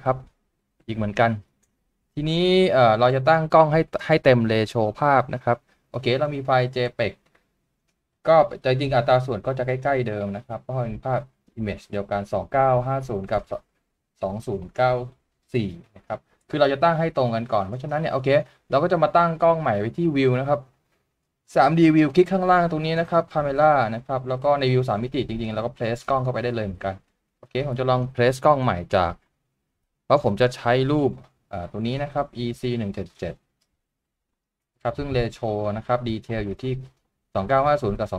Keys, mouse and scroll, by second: 0.2 shift+middle click, 6.4-6.9 scroll down 1, 24.6 shift+middle click, 25.9 shift+middle click, 27.2 middle click.